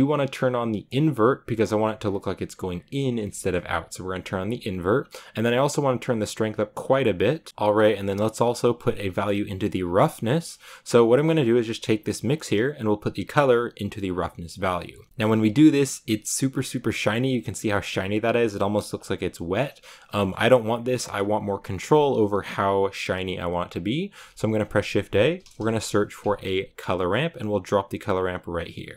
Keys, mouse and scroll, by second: 0.8 click, 1.4-1.7 scroll up 4, 2.5-2.9 scroll down 4, 2.9 click, 3.3 shift+middle click, 4.1-7.5 drag, 7.5 scroll down 3, 14.4 click, 15.0 shift+middle click, 15.9 scroll up 1, 16.8 scroll up 3, 19.0 scroll down 2, 19.6 scroll down 3, 19.7-26.8 middle drag, 26.8 shift+a, 28.2-28.9 drag.